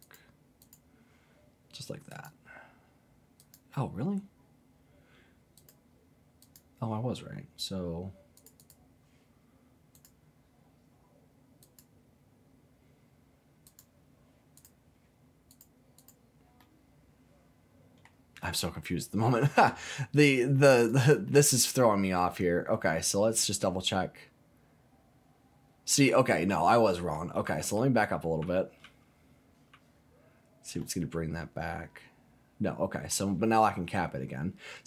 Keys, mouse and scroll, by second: 0.0 click, 0.6 click, 2.1 click, 3.4 click, 5.5 click, 6.4 click, 8.3 click, 8.6 click, 9.9 click, 11.6 click, 13.6 click, 14.5 click, 15.5 click, 16.0 click, 16.6-18.0 middle drag, 18.5 scroll down 2, 18.7 middle click, 20.8 click, 21.2 middle click, 22.3-22.7 scroll up 1, 22.7-27.1 middle drag, 27.7 ctrl+z, 28.4 ctrl+z, 28.8 ctrl+z, 29.7 ctrl+z, 30.8-33.1 middle drag.